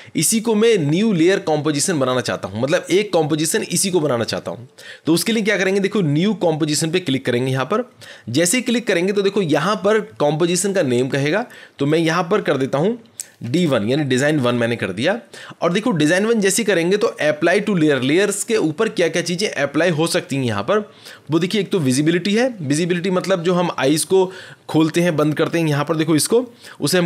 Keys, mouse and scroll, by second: 7.5 click, 11.8-18.3 drag, 13.4-14.3 typing.